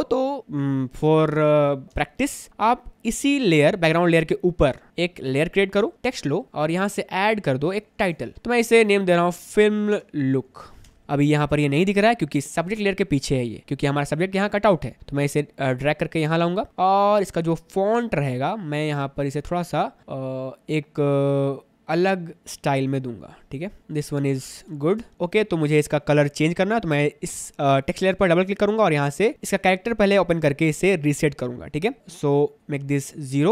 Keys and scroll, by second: 0.0 space, 2.1 space, 6.4 Escape, 6.5 ctrl+z, 9.2-10.7 typing, 10.9 Escape, 11.0 ctrl+z, 24.8 Escape, 25.1 space.